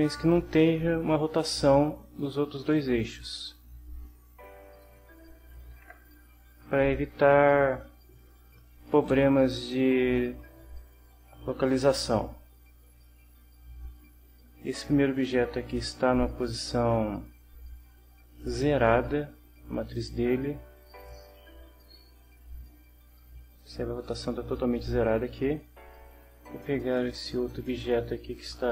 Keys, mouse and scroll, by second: 0.5 click, 2.1-5.0 drag, 5.7 ctrl+z, 6.3 middle click, 10.4 middle click, 12.6 click, 13.3-16.9 right drag, 17.2-18.6 right drag, 20.9 click, 26.8 click, 27.9 middle click.